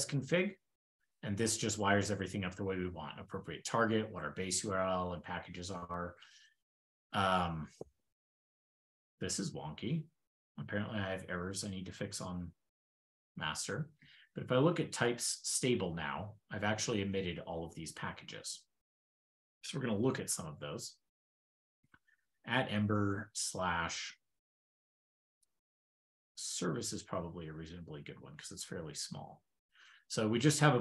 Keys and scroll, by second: 13.0 ctrl+l, 16.4 super+Tab, 17.3 super+k, 17.4 super+w.